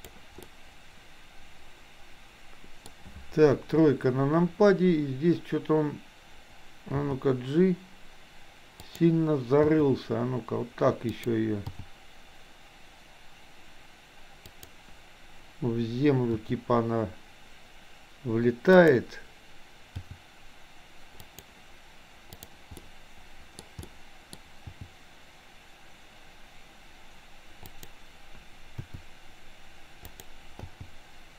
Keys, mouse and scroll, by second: 0.4-2.9 middle drag, 3.5 KP_3, 7.2 g, 9.7 r, 11.8 g, 16.3 r, 20.2 g, 22.4 click, 22.8 middle click, 23.8 middle click, 24.8 g, 28.9 r, 30.8 g.